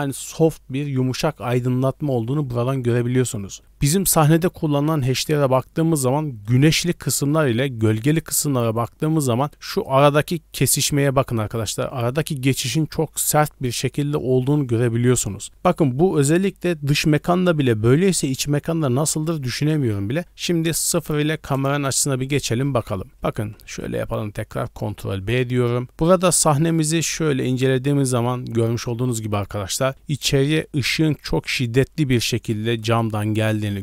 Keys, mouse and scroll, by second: 6.0-11.8 typing, 6.4 click, 7.2 click, 7.9 click, 8.4 click, 9.5 click, 10.3 click, 20.1 d, 20.2-21.7 right drag, 21.0 d, 21.7 KP_0, 23.1 scroll down 1, 23.1 ctrl+b, 31.9 d, 32.2 click, 32.6 d, 32.8 click, 32.8 d, 33.0-33.8 d.